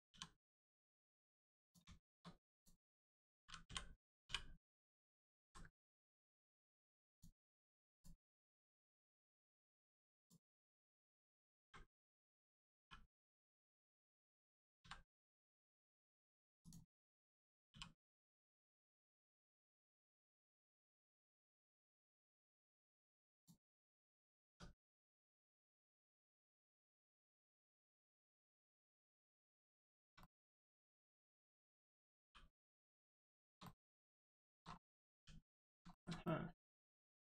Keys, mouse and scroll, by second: 0.1 r, 1.6 click, 2.5 click, 3.6 l, 4.2 u, 5.2 scroll down 1, 5.3 ctrl+z, 5.8 scroll up 1, 6.5 right click, 7.1 click, 7.5-7.9 scroll down 1, 7.9 click, 8.5 scroll down 1, 9.4 click, 10.4-10.8 scroll up 1, 11.6 a, 12.7 r, 13.5 right click, 16.6 click, 17.7 r, 23.3 click, 23.9 scroll down 1, 24.9 Tab, 25.3 click, 25.6 scroll up 1, 26.4 click, 27.3-27.7 scroll down 1, 27.7 middle click, 28.7-29.0 scroll up 1, 29.1 middle click, 29.8 shift+middle click, 30.2 middle click, 30.3 middle click, 30.7 shift+middle click, 31.1 scroll down 1, 32.1 g, 32.9 right click, 33.3 shift+middle click, 33.6 middle click, 33.7 middle click, 33.9 scroll up 1, 34.3 shift+middle click, 34.6-35.0 scroll up 1, 35.1 g, 35.5 right click, 35.9 shift+middle click, 36.2 middle click, 36.3 middle click, 36.9 scroll up 1, 37.2 shift+middle click.